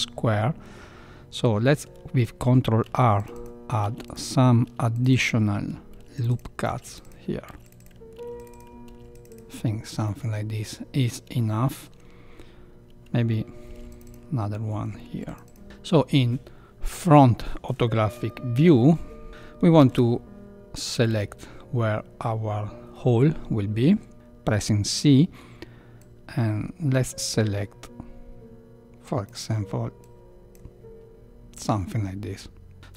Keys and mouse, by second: 2.8 ctrl+r, 3.8 ctrl+r, 4.6 ctrl+r, 5.9 ctrl+r, 6.6 ctrl+r, 7.4 ctrl+r, 8.1 ctrl+r, 8.8 ctrl+r, 10.0 middle click, 11.3 shift+middle click, 13.6 ctrl+r, 15.0 ctrl+r, 15.6 KP_1, 18.2 shift+middle click, 19.3 ctrl+r, 19.8 ctrl+3, 20.9 a, 21.1 a.